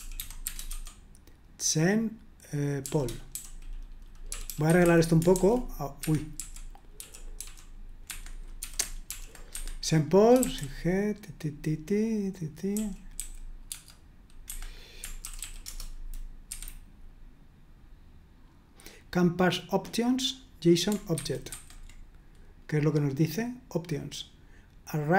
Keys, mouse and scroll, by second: 0.0-0.7 typing, 2.8-7.3 typing, 6.0 Escape, 8.1 Escape, 8.4-10.4 typing, 12.7-15.9 typing, 16.5 F5, 21.1 super+1, 21.5 super+2.